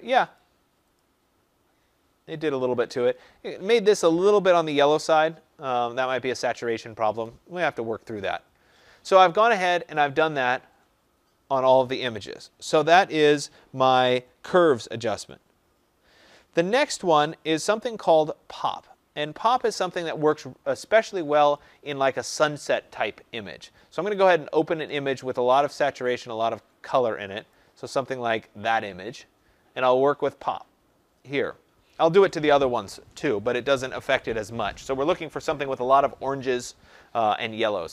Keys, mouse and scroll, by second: 0.3 click, 0.9 click, 9.2 click, 9.9 click, 21.5 click, 24.2 click, 26.2 click, 27.5 click.